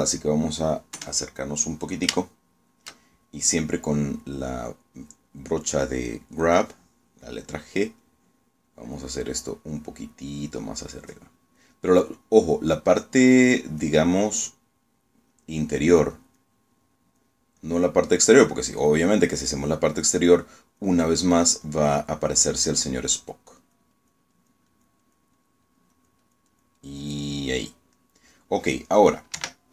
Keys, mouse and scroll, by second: 2.1 KP_Add, 3.3 shift+click, 3.3 shift+middle click, 9.2-10.2 drag, 10.5-11.6 drag, 12.1 click, 13.3 click, 14.5 click, 15.3 click, 16.5 click, 17.3 click, 18.1 click, 18.7 click, 19.4 click, 19.9 click, 20.9 click, 21.6 click, 22.3 click, 22.7 click, 23.3 click, 23.8 click, 24.3 click, 24.7 click, 25.5 click, 28.2 click, 29.1 middle click.